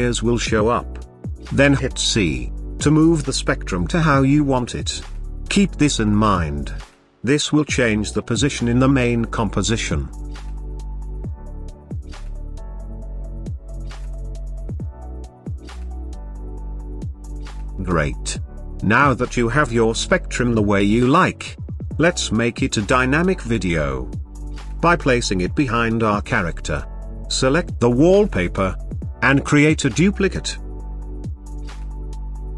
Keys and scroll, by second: 30.4 ctrl+d.